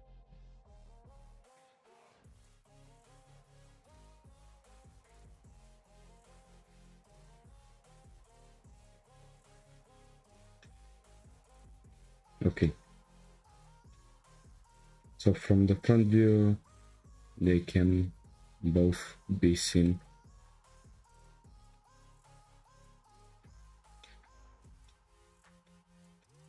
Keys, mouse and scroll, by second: 0.5 Tab, 1.8 click, 2.3 shift+click, 3.2 g, 19.3 Tab, 19.5-19.8 scroll down 4, 19.8-21.0 shift+middle drag, 21.0-21.4 scroll up 2, 21.4-23.5 shift+middle drag, 23.5-24.0 scroll down 4, 24.0-24.5 shift+middle drag, 24.5-24.8 scroll down 2, 24.8-26.4 shift+middle drag.